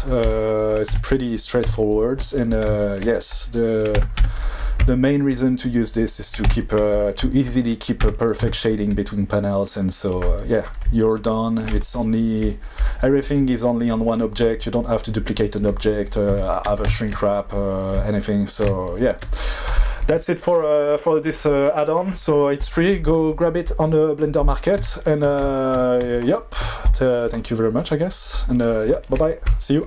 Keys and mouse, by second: 0.9 Tab, 4.2 1, 5.9 click, 6.4 Tab, 8.0 Tab, 8.4 Tab, 12.4 click, 12.7 click.